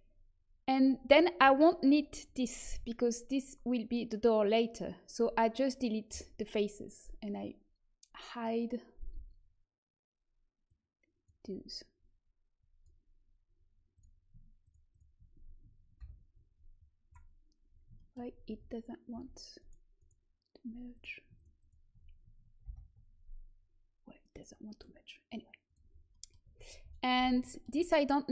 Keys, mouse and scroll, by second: 2.6 Delete, 10.6-15.9 drag, 15.9 ctrl+j, 18.1 click, 18.4 Tab, 19.1 Tab, 19.5-24.6 drag, 22.6 ctrl+j, 24.9 click, 26.0 click, 26.4 Tab, 26.9 z, 27.1 z.